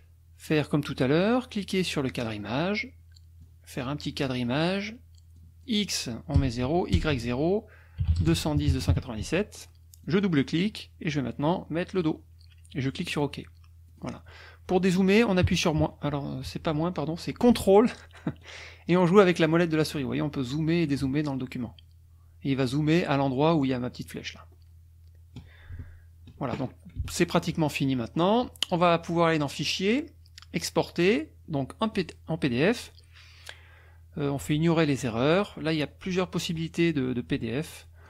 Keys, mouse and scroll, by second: 2.1 click, 3.4 click, 5.4 click, 6.4 KP_0, 6.7 Tab, 7.0 KP_0, 7.1 Tab, 8.0-8.9 typing, 8.3 Tab, 9.2 Tab, 10.0 click, 12.0 click, 13.0 click, 13.9 click, 15.4 KP_Subtract, 19.0-19.3 ctrl+scroll down 2, 19.3-20.5 ctrl+scroll up 4, 20.6-21.0 ctrl+scroll down 2, 21.3 ctrl+scroll up 2, 21.7-22.1 ctrl+scroll down 2, 22.6-23.1 ctrl+scroll up 2, 23.9-24.2 ctrl+scroll down 2, 24.4-24.7 ctrl+scroll up 2, 25.0-26.0 ctrl+scroll down 2, 26.0 ctrl+scroll down 1, 27.1-28.4 ctrl+scroll up 7, 29.5 click, 31.9 click, 36.1-38.0 drag.